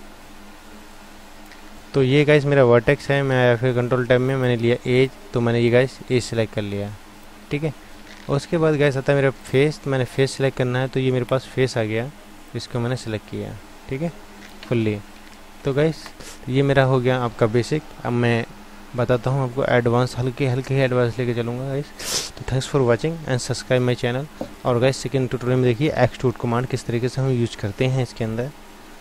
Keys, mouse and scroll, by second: 3.5 ctrl+Tab, 4.9 click, 6.4 click, 7.6 ctrl+Tab, 8.2 ctrl+Tab, 11.2-12.5 drag, 12.5-13.6 middle drag, 13.6 click, 14.8 ctrl+z, 15.1 ctrl+z, 15.6 ctrl+z.